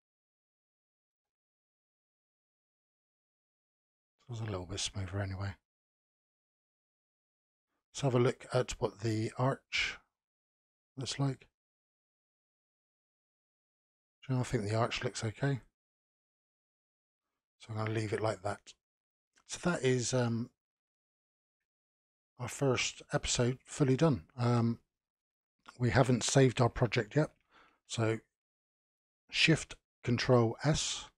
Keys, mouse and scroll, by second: 1.1 n, 2.3 Tab, 2.8-5.9 middle drag, 8.6-11.4 drag, 11.4-14.4 middle drag, 14.7-15.3 scroll up 1, 15.3-17.1 middle drag, 17.1-18.3 scroll down 11, 18.3-20.6 middle drag, 20.6 click, 22.4 click, 22.8 click, 23.5 scroll down 2, 23.9 click, 24.8-25.3 shift+middle drag, 25.3-28.7 scroll down 4.